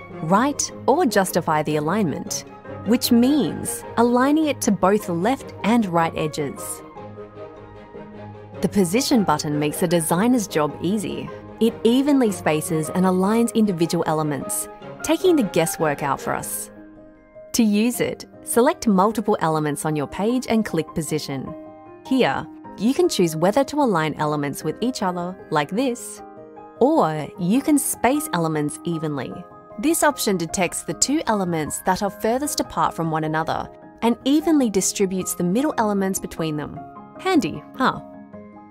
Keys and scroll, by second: 26.5 super+z.